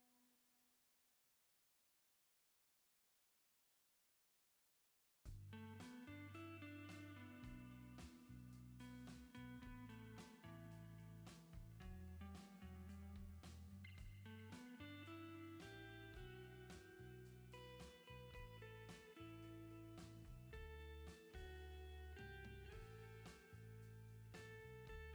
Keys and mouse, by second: 1.5 shift+middle click, 2.9 middle click, 3.9 shift+middle click, 4.4 shift+middle click, 6.4 ctrl+z, 7.0 Return, 7.1 ctrl+z, 8.0 Return, 9.8 Return, 13.1 shift+click, 15.0 shift+middle click, 17.4 click, 18.1 [, 18.7 ctrl+z, 18.8 [, 22.4 ctrl+z, 23.8 ctrl+z.